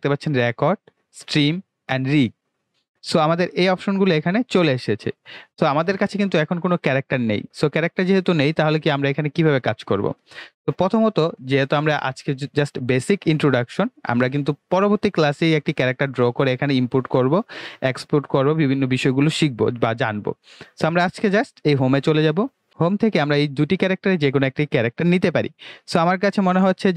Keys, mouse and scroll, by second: 1.2 click, 11.3 click, 21.7 click.